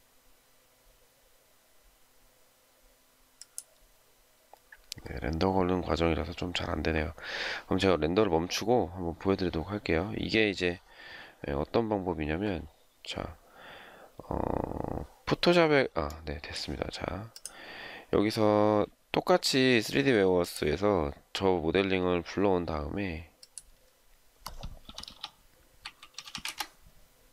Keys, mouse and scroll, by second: 25.4-26.6 typing.